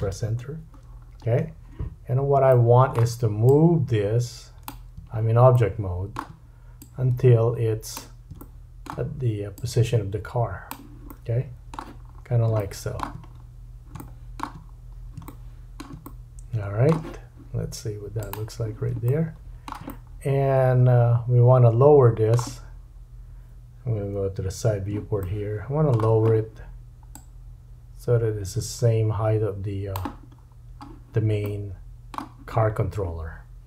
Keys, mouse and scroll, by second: 0.8-2.3 scroll down 7, 2.5 shift+middle click, 3.4 click, 5.5-18.3 shift+drag, 5.5 shift+middle click, 8.4 shift+middle click, 11.1 middle click, 12.0-12.5 scroll up 4, 12.6 shift+middle click, 13.2-13.7 scroll up 4, 14.0 shift+middle click, 14.6-15.1 scroll up 4, 15.2 shift+middle click, 16.0 middle click, 18.3-27.1 middle drag, 24.2 KP_3, 27.1-33.6 drag, 30.4-31.4 scroll down 3, 31.4 middle click.